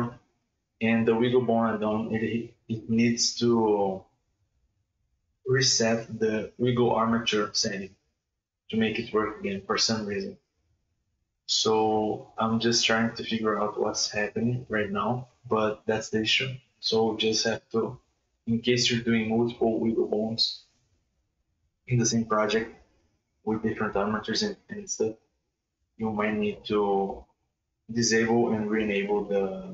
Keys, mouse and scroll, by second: 0.0 space, 3.3 click, 5.2 click, 7.3-7.9 scroll down 5, 7.9 click, 8.1 click, 8.3 space, 9.0 g, 9.6 ctrl+z, 9.8 right click, 10.0 g, 12.7 space, 13.3 right click, 13.4 right click, 13.6 right click, 13.8 right click, 13.9 right click, 14.1 right click, 14.4 right click, 15.1 click, 15.6 Tab, 16.0 r, 16.4 right click, 16.5 r, 17.8-18.3 shift+middle drag, 18.3 Tab, 19.3 shift+right click, 20.3 Tab, 22.5-24.0 drag, 25.5-26.9 middle drag, 28.9 space.